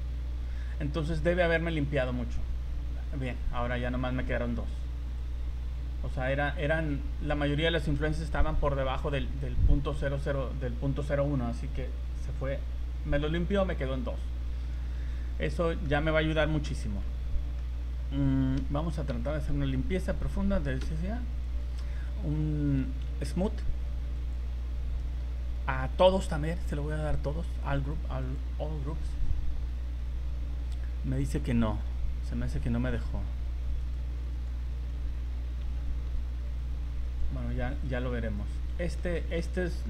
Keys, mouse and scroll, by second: 1.6 right click, 3.6 right click, 5.2 click, 14.5 z, 14.9 z, 15.2 middle click, 16.7 v, 17.0 middle click, 18.6 a, 19.1 a, 20.8 v, 21.4 right click, 22.8 a, 23.1 a, 24.1 click, 25.4 scroll down 3, 26.1 click, 33.8 right click, 34.3 right click, 34.7 z, 35.6 v, 37.1 right click, 37.9 right click, 38.4 right click, 38.7 middle click, 39.1 shift+middle click.